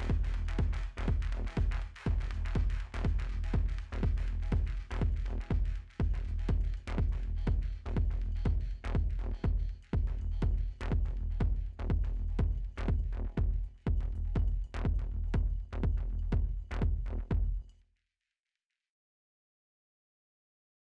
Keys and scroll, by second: 11.3 ctrl+0.